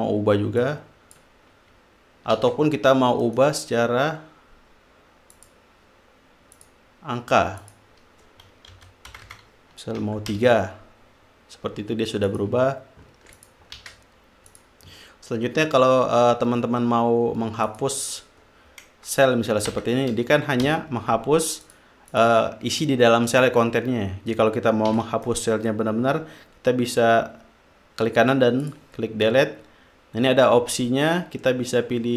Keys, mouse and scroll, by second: 1.0 click, 2.7 ctrl+z, 3.6 right click, 5.7 click, 6.9 click, 8.0 click, 9.1 Left, 9.5 BackSpace, 10.4 3, 10.7 Return, 12.8 click, 13.7 ctrl+click, 14.2 ctrl+z, 14.9 click, 18.0 click, 20.0 BackSpace, 21.0 Return, 22.0 click, 22.5 click, 25.3 ctrl+z, 25.6 ctrl+right click, 29.0 click.